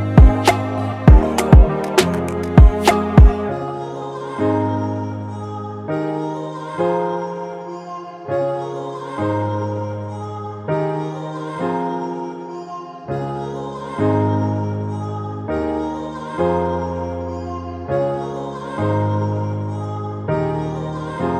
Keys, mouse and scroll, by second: 5.1 double click, 12.3 click, 12.6 ctrl+t, 18.5 Return, 20.2 double click.